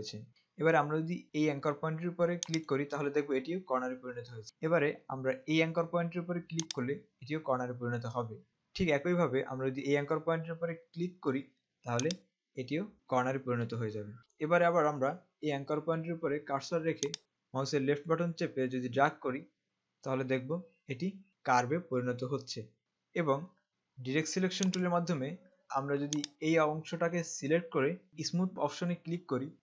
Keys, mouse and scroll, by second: 2.6 click, 6.7 click, 12.3 click, 14.4 z, 17.1 click, 24.9 click.